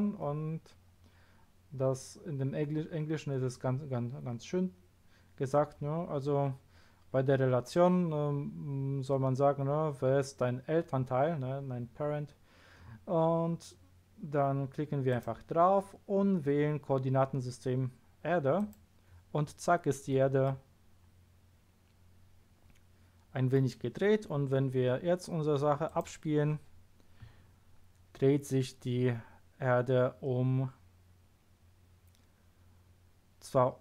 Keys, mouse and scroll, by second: 0.8 scroll down 1, 1.4 scroll down 1, 15.1 click, 18.5 click, 20.4-21.8 middle drag, 25.8 click.